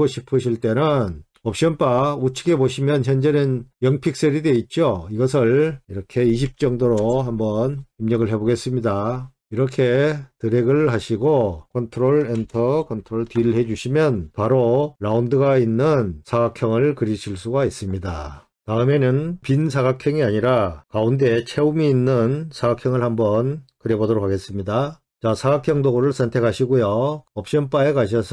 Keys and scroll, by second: 11.7 ctrl+Return, 11.7 ctrl+d.